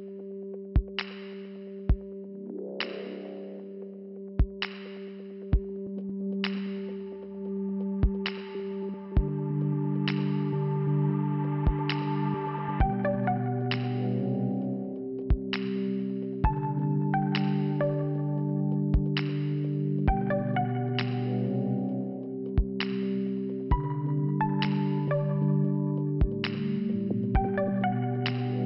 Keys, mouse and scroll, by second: 0.0 click, 1.9 click, 2.8 click, 5.4 click, 6.5 middle click, 9.3 click, 12.1 shift+Return, 12.9 click, 20.9 click, 23.0 click, 25.7 click, 27.9 click.